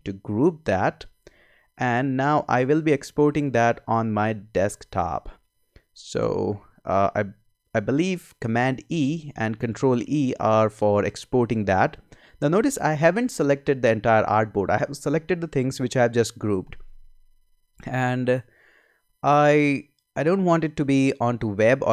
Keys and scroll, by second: 8.8 super+e.